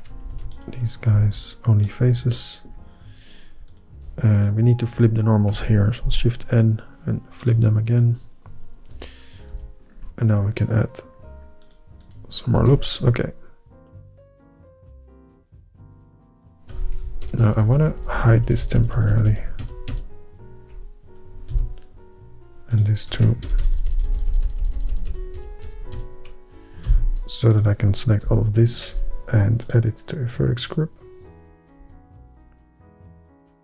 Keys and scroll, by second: 0.3 ,, 1.3 x, 5.6 shift+n, 9.6 ctrl+r, 12.7 alt+a, 17.4 ctrl+KP_Add, 17.5 ctrl+KP_Add, 17.7 ctrl+KP_Add, 17.8 ctrl+KP_Add, 17.9 ctrl+KP_Add, 18.1 ctrl+KP_Add, 18.3 ctrl+], 18.4 ctrl+], 18.6 ctrl+KP_Add, 18.7 ctrl+KP_Add, 18.9 ctrl+KP_Add, 19.1 ctrl+], 19.2 ctrl+], 19.4 ctrl+], 19.7 ctrl+], 20.0 ctrl+], 21.6 h, 23.6 ctrl+KP_Add, 23.7 ctrl+KP_Add, 23.9 ctrl+KP_Add, 24.0 ctrl+KP_Add, 24.1 ctrl+KP_Add, 24.3 ctrl+KP_Add, 24.4 ctrl+KP_Add, 24.6 ctrl+KP_Add, 24.7 ctrl+KP_Add, 24.9 ctrl+KP_Add, 25.0 ctrl+KP_Add, 25.2 ctrl+KP_Add, 25.5 ctrl+KP_Add, 25.8 ctrl+KP_Add, 26.1 ctrl+], 27.0 h, 28.4 l, 31.9 alt+h, 32.5 alt+a.